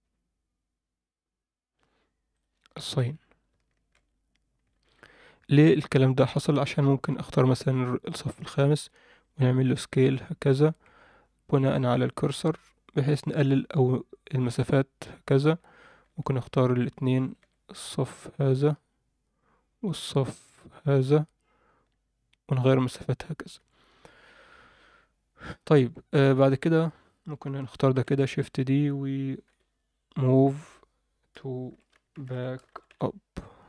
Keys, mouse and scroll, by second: 2.3 click, 3.9 alt+h, 4.8 alt+a, 6.4 click, 7.6 click, 8.2 scroll up 1, 9.2 s, 16.2 shift+click, 18.1 click, 20.3 click, 20.9 click, 21.7 s, 24.1 Tab, 24.2-24.6 scroll down 1, 25.7 Tab, 25.7 scroll down 1, 25.9 scroll up 1, 26.4 Tab, 28.0 shift+d, 29.4 m.